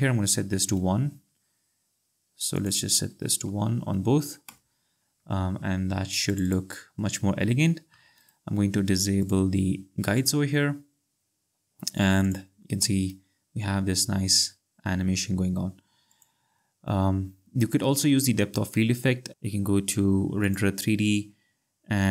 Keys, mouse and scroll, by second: 0.2 BackSpace, 0.4 1, 2.6 click, 3.5 BackSpace, 3.7 1, 4.5 Return, 6.3 click, 8.2 right click, 9.2 click, 16.1 click, 17.9 space, 19.3 click, 20.4 click.